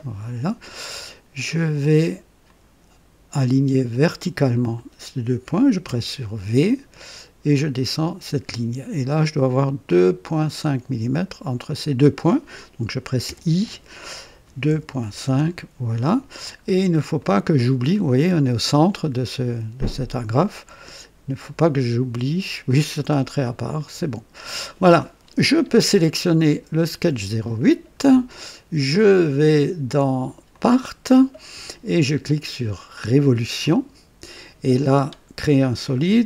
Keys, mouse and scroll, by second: 1.0 right click, 2.4 click, 4.5 click, 5.8 v, 7.6-9.0 drag, 10.3 click, 11.7 click, 13.0-15.2 typing, 15.2 KP_Enter, 16.6-16.9 scroll down 1, 16.9-17.7 typing, 17.2-18.0 right drag, 21.4 click, 22.7 click, 23.8 click, 26.7 click, 29.0 click, 30.5 click, 33.6 click.